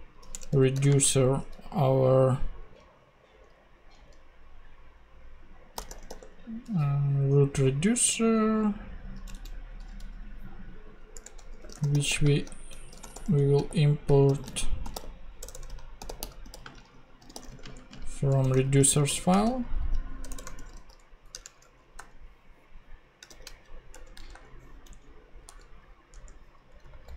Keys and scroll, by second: 0.3 Return, 0.8 shift+;, 0.9 shift+space, 5.7-6.6 typing, 9.3 ctrl+Tab, 11.1 Return, 11.3-20.5 typing, 21.3 Return, 21.6 super+Right, 21.9 super+;, 22.9 ;, 23.3 shift+r, 23.9 shift+Return, 24.3 ;, 26.7 Up, 26.9 super+Right.